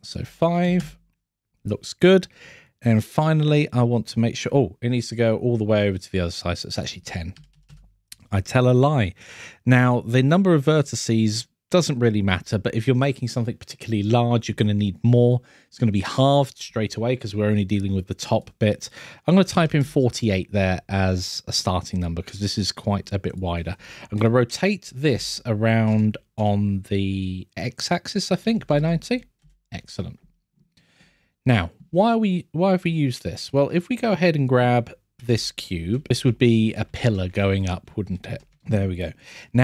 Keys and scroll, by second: 22.8 scroll, 32.9 scroll.